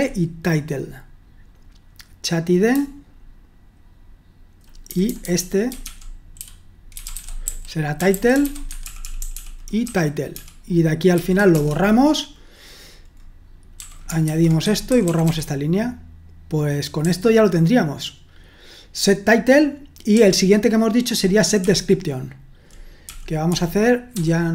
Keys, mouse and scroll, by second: 3.4-11.6 typing, 14.0-15.4 typing, 20.8-24.5 typing.